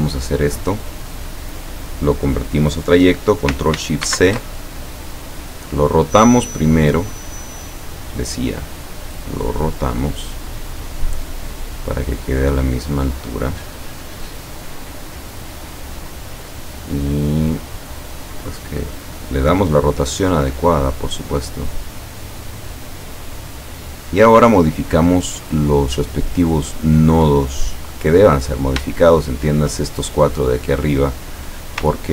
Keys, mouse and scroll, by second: 4.1 ctrl+shift+c, 5.1 click, 5.6 click, 6.8 click, 7.6 click, 8.2 click, 8.8 click, 9.9-13.8 drag, 14.1-15.4 drag, 16.1-20.8 drag, 21.2 click, 23.2 click, 23.6 click, 27.9 click, 29.0 shift+click, 30.6 click, 32.0 ctrl+scroll up 2.